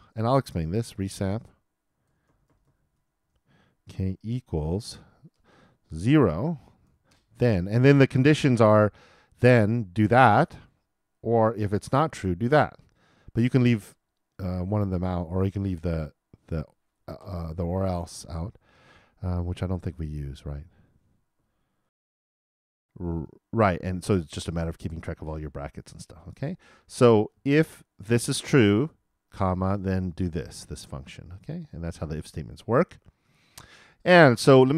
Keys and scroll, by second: 9.3 shift+[, 9.4 shift+], 12.1 shift+space, 12.4 shift+[, 12.5 shift+], 21.8 alt+|.